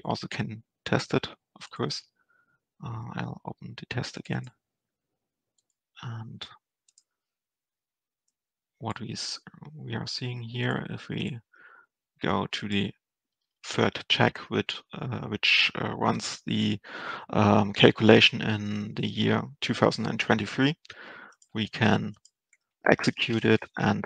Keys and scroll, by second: 23.4 ctrl+alt+Return.